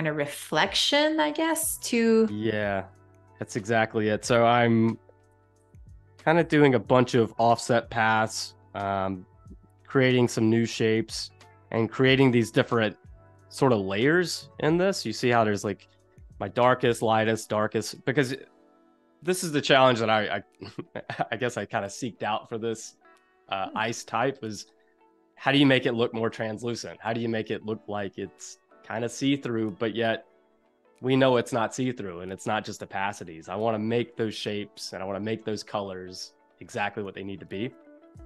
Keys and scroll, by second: 6.2 a, 14.3 space.